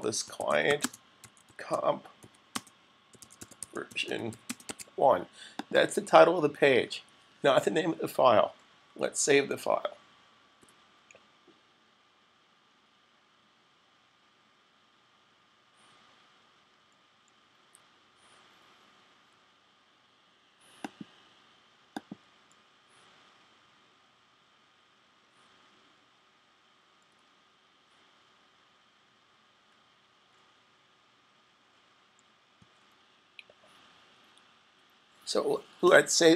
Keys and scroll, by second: 0.0-4.6 typing, 5.7 typing, 10.5 super+s, 32.4 super+s.